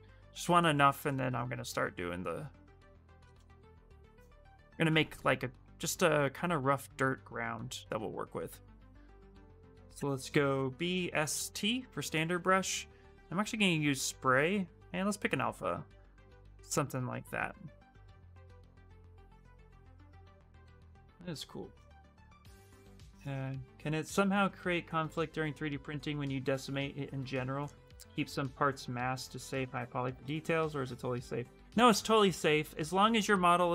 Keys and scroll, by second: 0.0 shift+f, 8.6 b, 9.7-11.6 typing.